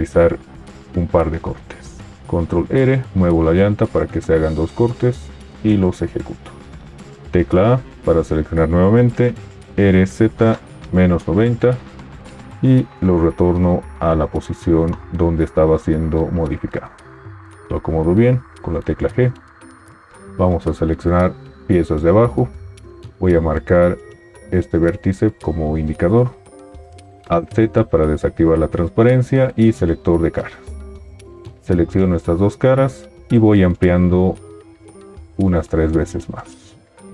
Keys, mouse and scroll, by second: 2.3 ctrl+r, 3.1-5.1 middle drag, 3.1-5.1 scroll up 2, 7.3 a, 9.7 r, 12.9 g, 18.6 g, 27.2 alt+z.